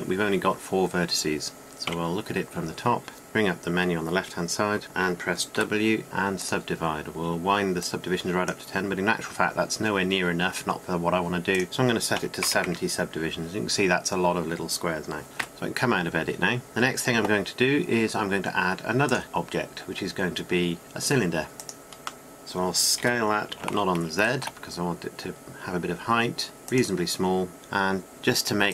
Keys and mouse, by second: 0.6 Tab, 2.7 KP_7, 3.3 t, 6.0 w, 8.7 w, 9.6-11.6 drag, 12.1-14.4 drag, 16.4 Tab, 22.3 click, 22.4 middle click, 22.8 middle click, 24.0 s.